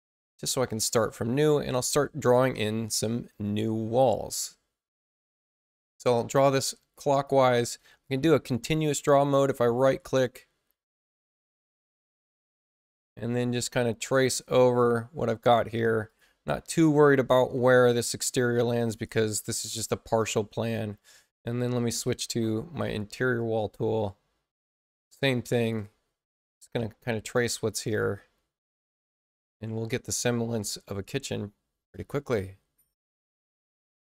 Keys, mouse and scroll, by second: 5.3-7.2 drag, 8.0-9.3 right drag, 10.8 click, 11.8 click, 13.5 click, 16.0 click, 18.1 click, 19.0 click, 20.4 space, 23.3-25.6 drag, 27.9-29.5 drag, 30.8-31.8 drag, 32.8 click.